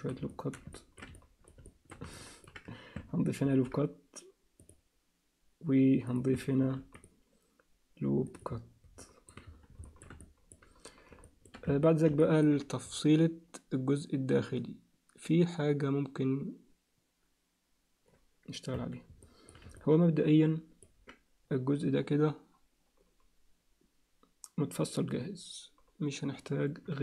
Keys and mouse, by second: 0.3 alt+shift+middle click, 0.7 ctrl+alt+middle click, 1.1 alt+middle click, 1.6 alt+shift+middle click, 2.1 ctrl+alt+middle click, 3.4 ctrl+r, 6.6 ctrl+r, 9.0 alt+middle click, 9.8 shift+middle click, 10.2 alt+middle click, 11.2 shift+middle click, 11.7 Tab, 12.2 ctrl+alt+middle click, 18.7 Tab, 19.2 alt+middle click, 19.8-20.8 ctrl+alt+middle drag.